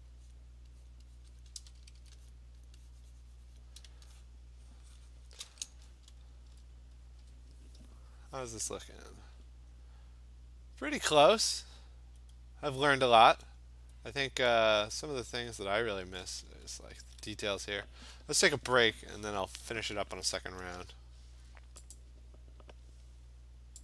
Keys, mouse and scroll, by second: 0.3 click, 0.9 click, 1.2 click, 1.4 alt+click, 1.4 click, 1.5 click, 1.6 ], 1.8 ], 2.0 click, 2.0 ], 2.3 click, 2.6 click, 3.0 click, 3.6 click, 5.3 click, 6.5 middle click, 6.5 middle click, 6.6 middle click, 6.7-7.1 scroll, 9.0-9.8 scroll, 9.8-10.5 scroll, 11.3-12.1 scroll down 10, 12.1 scroll up 2, 12.4-12.7 scroll down 2, 12.7-13.2 scroll up 8, 14.0 scroll down 2, 14.1-14.8 scroll, 14.9-15.7 scroll, 16.6 scroll, 17.7 scroll, 19.3-19.9 scroll, 22.0 click.